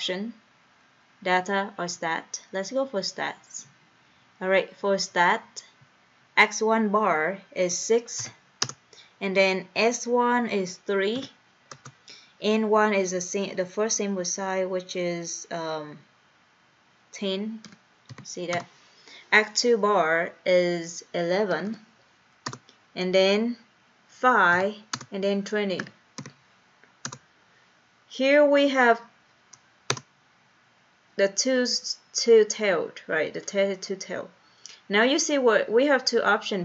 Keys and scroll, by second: 3.5 Right, 3.9 Return, 6.1 Down, 8.2 6, 8.7 Return, 11.7 3, 11.8 Return, 17.7 1, 18.1 0, 18.6 Return, 21.6 1, 21.7 1, 22.5 Return, 24.6 5, 25.0 Return, 25.9 2, 26.4 0, 27.1 Return, 29.9 Return.